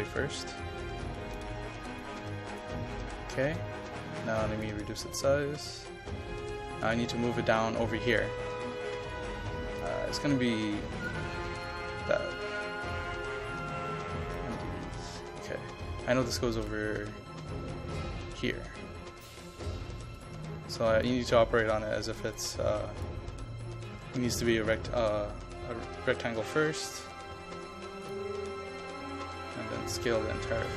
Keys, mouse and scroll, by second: 1.5 KP_0, 1.8 KP_Decimal, 2.0 KP_5, 2.6 click, 4.8 KP_0, 5.0 KP_Decimal, 5.2 KP_5, 5.7 click, 10.0 KP_5, 10.4 click, 11.2 KP_5, 11.6 click, 27.2 KP_0, 27.4 KP_Decimal, 27.7 KP_5, 28.1 click.